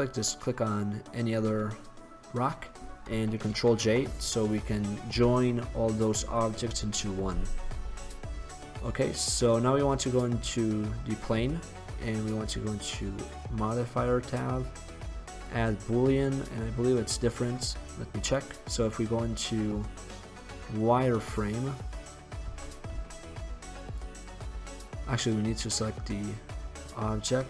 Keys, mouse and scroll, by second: 0.2 middle click, 1.3-2.6 middle drag, 3.6 ctrl+j, 8.2-9.1 middle drag, 9.1 right click, 9.4-10.7 drag, 10.8-15.5 drag, 17.6 middle drag, 17.6 drag, 17.9 middle drag, 20.9 middle drag, 22.6 z, 23.0 z.